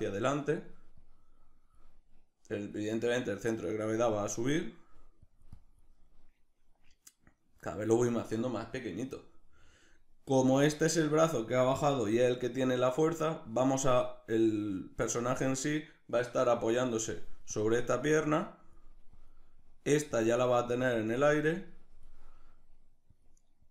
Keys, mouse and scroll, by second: 15.3-23.7 drag.